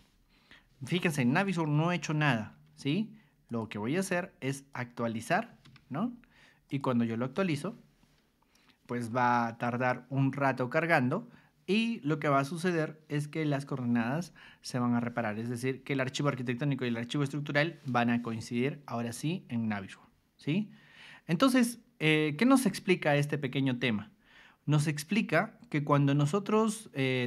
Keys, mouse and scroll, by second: 2.5 ctrl+1, 3.5 click, 4.7 ctrl+click, 5.6 Escape, 6.7 click.